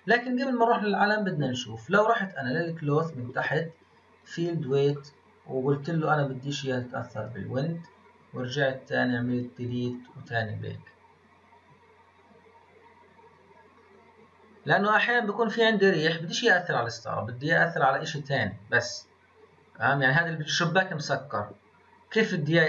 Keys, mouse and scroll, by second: 2.7-4.2 scroll down 15, 4.2-4.6 drag, 4.6-5.8 scroll down 11, 6.5-7.8 drag, 7.8-9.1 scroll up 14, 9.3-21.8 drag.